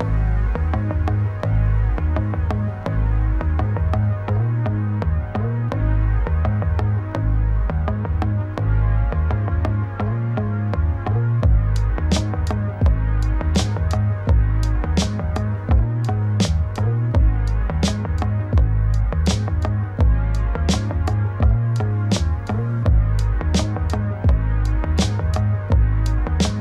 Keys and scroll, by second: 3.0 ctrl+space, 8.7 ctrl+z, 10.7 ctrl+space, 23.5 ctrl+;.